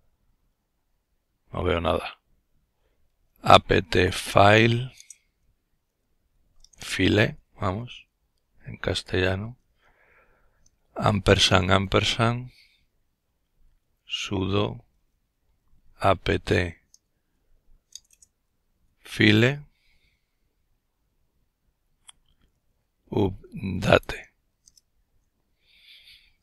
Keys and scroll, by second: 1.6-6.9 typing, 9.6-9.9 typing, 11.9-18.2 typing, 21.0-23.1 typing, 23.3 Return, 25.0-25.8 typing.